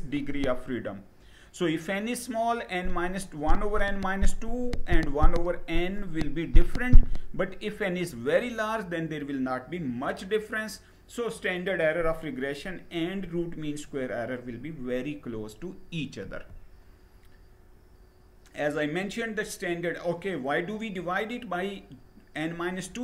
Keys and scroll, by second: 15.8 Down.